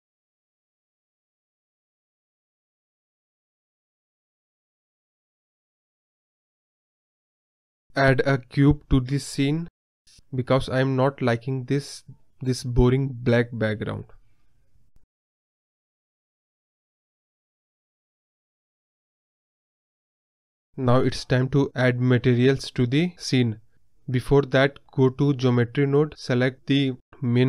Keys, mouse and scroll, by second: 0.6 m, 1.6-3.5 drag, 3.5 scroll up 3, 4.0 space, 6.7 space, 7.1 scroll up 1, 7.6 click, 8.3 scroll down 1, 8.4-8.8 scroll up 1, 8.8-10.8 drag, 12.1-12.4 scroll down 6, 12.4 middle click, 12.9 click, 13.5-14.5 scroll down 2, 14.3 shift+a, 14.5 middle click, 14.8 s, 15.8 scroll down 1, 15.9-16.8 middle drag, 16.8 s, 18.5 scroll up 1, 18.5 middle drag, 18.7 scroll down 1, 18.8-19.2 scroll up 1, 19.2 KP_0, 19.8-20.8 drag, 20.8 space, 20.9 space, 21.2-22.7 drag, 22.7 scroll down 2, 22.9-24.0 scroll up 1, 24.0-27.4 drag.